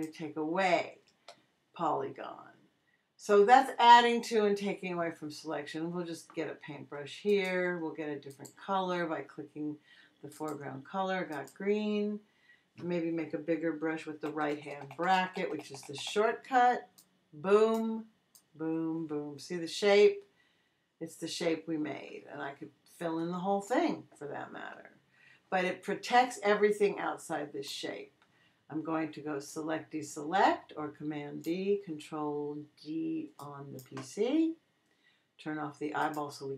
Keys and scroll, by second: 14.3 ].